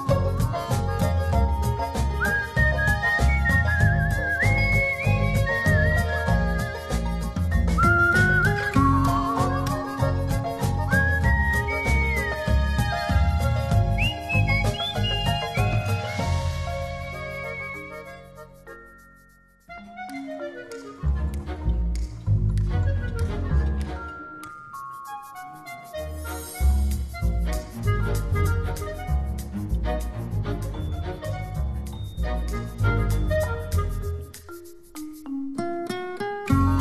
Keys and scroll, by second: 20.0 alt+space, 20.6 v, 32.3 space.